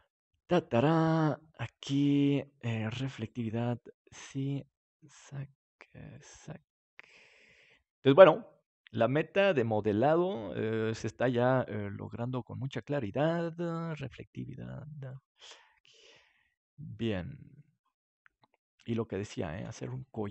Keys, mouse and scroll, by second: 1.3 right click, 2.3-6.7 drag, 10.3 right click, 11.3 middle click, 12.0-13.9 drag, 15.0-17.4 drag, 19.5 ctrl+s.